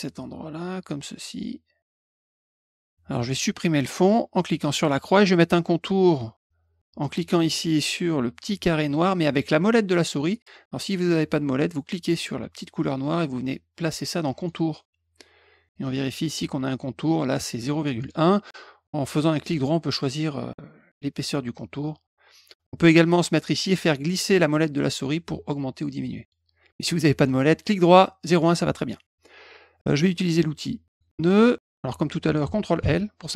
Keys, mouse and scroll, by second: 4.7 click, 11.8-14.4 drag, 18.0 right click, 22.3 click, 23.9-24.2 scroll up 4, 24.6 scroll up 2, 25.0-25.3 scroll down 2, 25.5 scroll up 2, 26.4 scroll down 2, 27.1 right click, 28.2 click, 30.9 click, 32.8 ctrl+l.